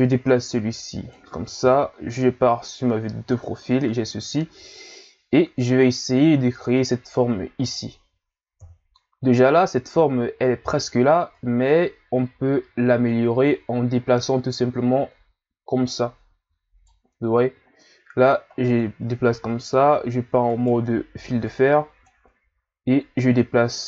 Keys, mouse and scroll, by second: 1.6 KP_3, 2.6-3.1 ctrl+scroll down 1, 8.6 KP_1, 11.3 right click, 18.5 ctrl+scroll up 4, 19.5 z, 20.5 right click, 21.1 b, 23.2 click.